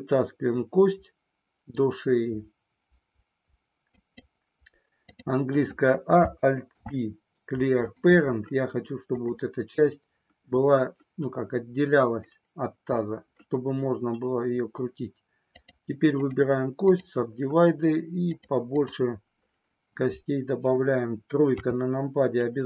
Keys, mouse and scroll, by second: 4.0 click, 5.0 click, 6.7 alt+p, 18.3 click, 18.7 click, 21.6 KP_3.